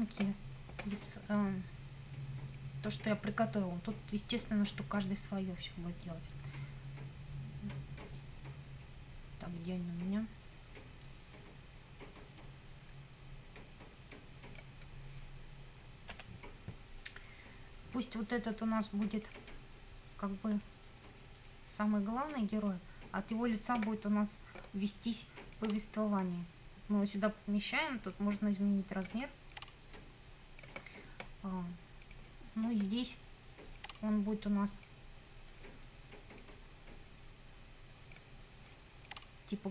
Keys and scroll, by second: 16.2 F9.